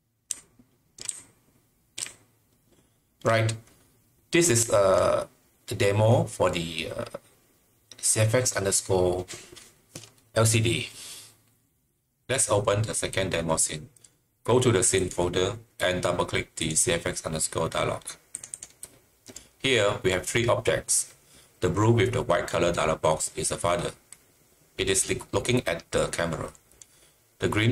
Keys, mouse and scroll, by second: 0.3-3.2 typing, 4.6 typing, 7.8-8.5 typing, 14.9 click, 16.5 click, 18.3 click, 18.5 Delete, 18.5 double click, 18.7 double click.